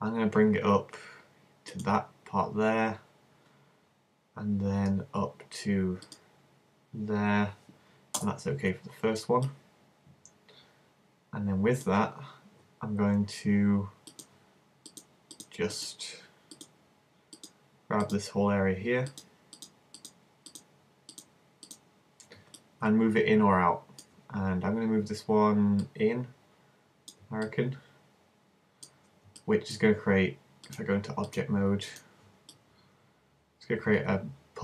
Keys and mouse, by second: 9.5-10.8 middle drag, 22.6-23.8 middle drag, 25.8-27.5 drag, 27.5-29.3 middle drag, 30.6 click, 32.6-34.6 middle drag.